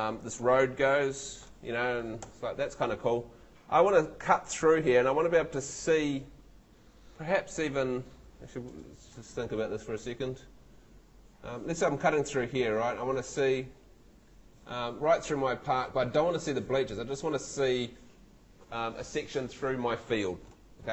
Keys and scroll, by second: 2.2 ↺.